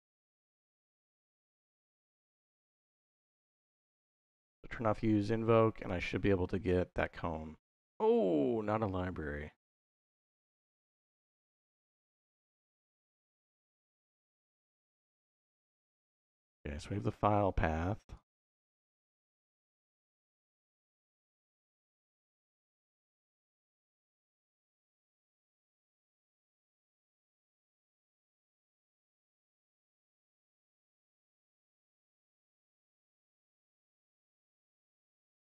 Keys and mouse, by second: 2.0 middle click, 4.0 click, 6.9-12.1 drag, 14.0 middle click, 14.9 middle click, 17.2 middle click, 17.9 click, 18.7-20.1 drag, 20.4 middle click.